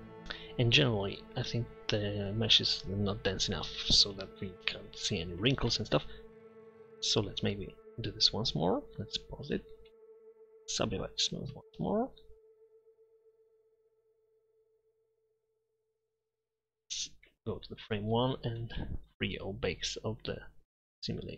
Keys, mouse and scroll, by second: 5.1-6.5 middle drag, 8.4 click, 9.4-9.9 middle drag, 10.1 a, 10.1 w, 12.1 Tab, 16.1-16.6 drag, 17.9-20.3 middle drag.